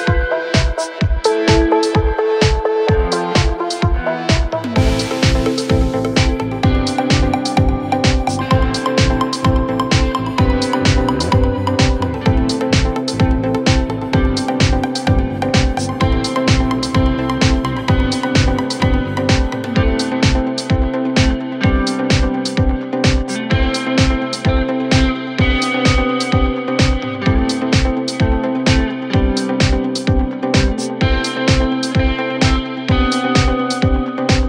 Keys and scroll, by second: 3.8 Escape, 18.2 F3, 22.4 ctrl+g, 23.3 c, 23.8 F3, 24.3 Escape, 24.9 shift+F2, 25.2 Escape.